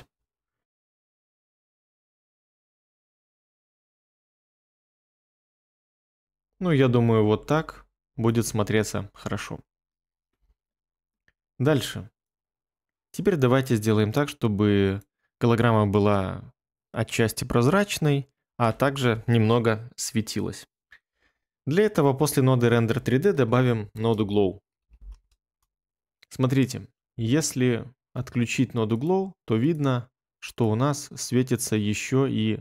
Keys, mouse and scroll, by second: 5.6 ctrl+middle click, 5.8 ctrl+middle click, 23.9-25.5 typing, 27.5 ctrl+middle click, 27.6 ctrl+middle click.